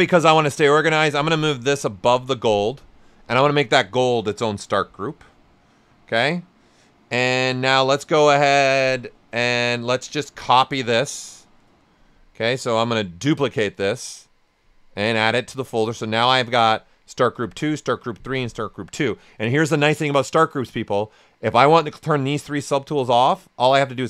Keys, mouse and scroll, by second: 1.2-3.1 drag, 10.5-16.4 drag.